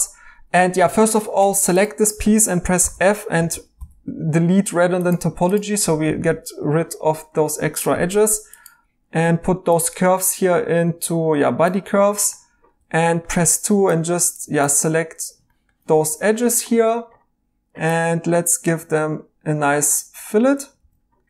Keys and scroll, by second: 1.4 Tab, 2.8-3.8 typing, 8.0 2, 12.8 2, 20.8 e.